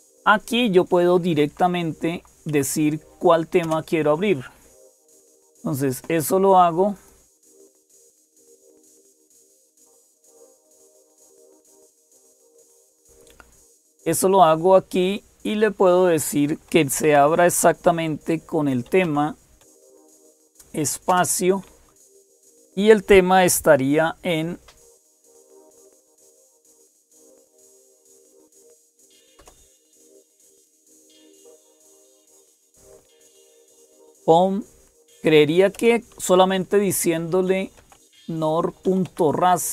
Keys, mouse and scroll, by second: 0.0-39.7 typing, 0.2 Up, 0.2 Down, 0.2 Right, 3.4 Right, 6.7 click, 9.8 click, 14.8 click, 27.2 click, 31.2 click.